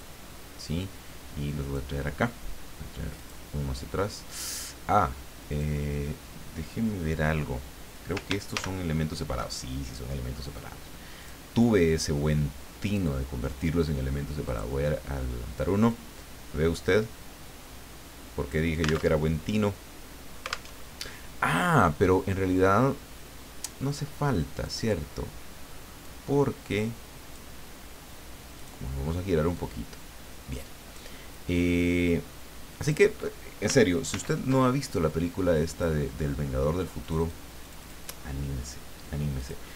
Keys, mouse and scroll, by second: 0.0-1.9 ctrl+drag, 3.1 click, 5.5 click, 8.5 ctrl+shift+g, 11.1 click, 11.6-13.8 drag, 14.4 click, 15.9-18.7 drag, 19.1 alt+Tab, 20.7 alt+Tab, 24.6 click, 26.0-27.8 drag, 28.6 click, 29.5-31.2 drag, 31.3-33.1 drag, 34.1 ctrl+d, 34.9-36.0 ctrl+drag, 37.0 click, 37.6 click, 39.4 click.